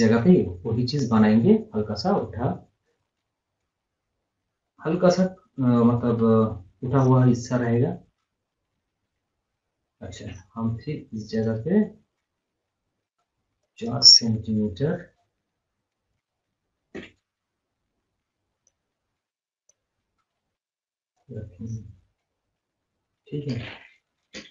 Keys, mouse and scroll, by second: 0.5 scroll, 1.6 scroll down 1, 3.0 scroll, 3.4 scroll, 3.5-4.0 scroll down 1, 8.6 scroll up 1, 9.0 scroll down 1, 10.3 o, 11.3 click, 13.6 click, 18.6 click, 20.3 right click, 21.1 click, 21.6 scroll up 1, 21.8 scroll down 1, 22.0 scroll up 1, 22.7 scroll down 1, 23.0 scroll up 1.